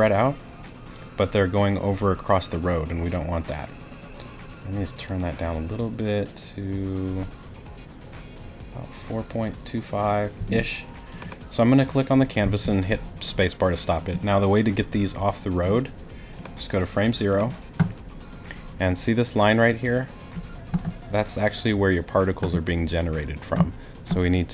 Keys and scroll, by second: 10.4 space, 12.4 space.